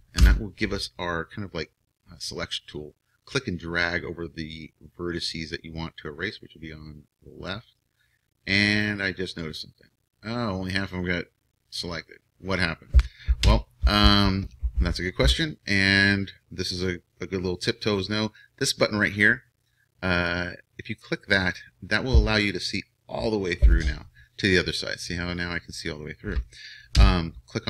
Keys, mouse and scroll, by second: 0.2 b, 9.5-11.8 middle drag, 13.4 KP_1, 21.0-23.6 drag, 27.0 KP_1.